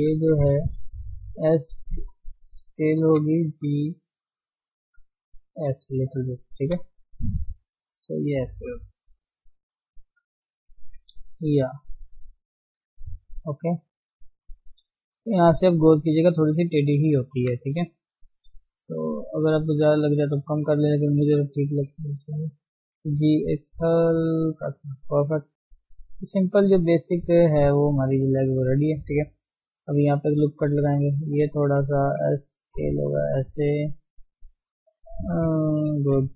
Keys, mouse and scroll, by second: 0.3 alt+shift+click, 0.5 shift+z, 1.2 s, 3.1 g, 6.0-6.4 scroll down 3, 6.4 shift+middle click, 6.6 scroll up 1, 6.9 shift+z, 7.8 click, 8.0 shift+z, 8.8 g, 10.8 Tab, 11.0-11.3 scroll down 3, 11.3 click, 11.6 shift+middle click, 12.0-14.9 middle drag, 14.9 KP_1, 15.3-16.7 scroll up 1, 18.1 shift+middle click, 18.3 scroll up 1, 18.5 Tab, 19.1 shift+middle click, 19.8 click, 22.7 g, 25.0 Tab, 25.1-25.5 scroll down 4, 25.5 shift+middle click, 25.7-26.0 scroll up 1, 26.0 shift+middle click, 26.2-26.6 scroll down 2, 26.6 shift+middle click, 26.8-27.6 scroll up 3, 27.0 Tab, 27.6 shift+middle click, 27.8 scroll down 3, 28.0-29.4 scroll up 2, 28.1 shift+middle click, 29.4 ctrl+r, 30.7-31.3 scroll up 2, 31.3 click, 31.7 alt+shift+click, 32.1 s, 34.0 scroll down 3, 34.1-35.6 middle drag, 35.6 KP_3, 36.1-36.3 scroll up 2.